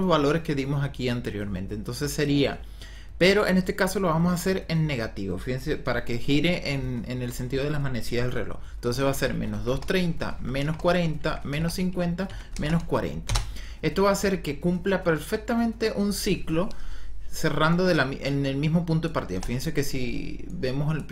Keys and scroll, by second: 8.9 KP_Subtract, 9.2-12.6 typing, 10.2 KP_Subtract, 11.1 KP_Subtract, 12.1 KP_Subtract, 13.1 Return, 19.2 KP_0.